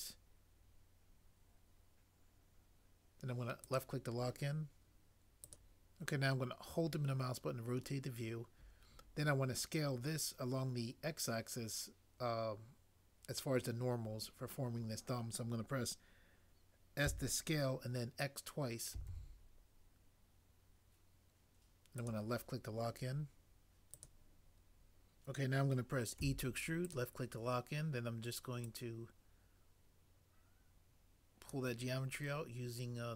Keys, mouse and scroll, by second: 17.0 s, 19.0 typing, 26.1 e.